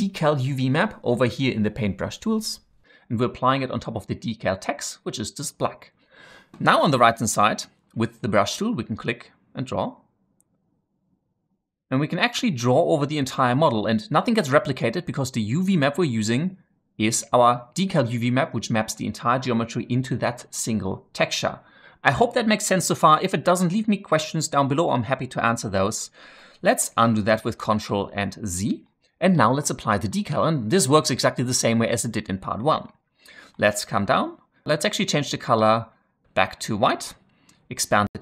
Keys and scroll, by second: 27.7 ctrl+z.